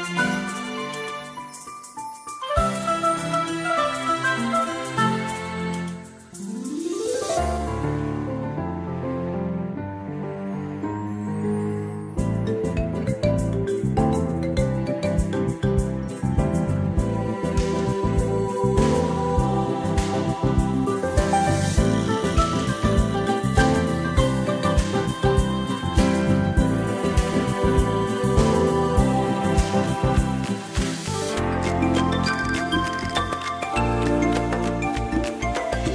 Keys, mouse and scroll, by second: 7.0 click, 10.6 click, 15.9 click, 19.9 click, 21.8 space, 27.4 click, 30.2 click, 33.1 shift+click.